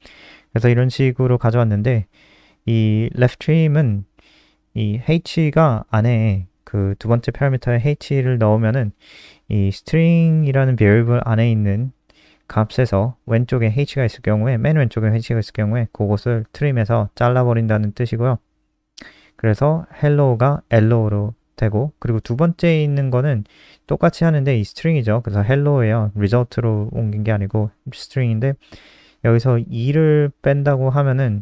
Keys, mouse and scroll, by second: 0.3 ctrl+c, 0.4 click, 0.9 Return, 1.1 ctrl+v, 9.0 click, 9.8 shift+Left, 13.3 click, 25.3 click.